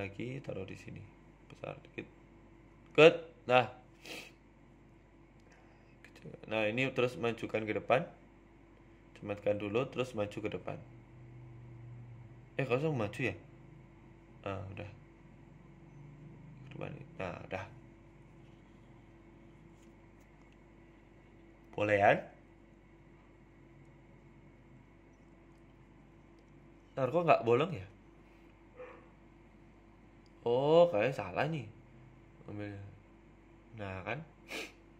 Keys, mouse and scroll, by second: 0.6 s, 1.3 g, 2.4 s, 5.3 g, 6.8 s, 7.7 middle click, 9.3 s, 11.0 middle click, 12.5 middle click, 13.1 right click, 13.4 Tab, 14.0 right click, 14.2 middle click, 14.9 g, 16.1 Tab, 16.9 right click, 17.4 g, 18.8 middle click, 21.4 right click, 22.3 click, 23.8 click, 25.8 right click, 26.6 right click, 27.3 middle click, 28.3 middle click, 29.8 z, 30.7 right click, 31.5 h, 31.7 middle click, 33.1 ctrl+z, 33.6 right click, 34.3 click, 34.8 click.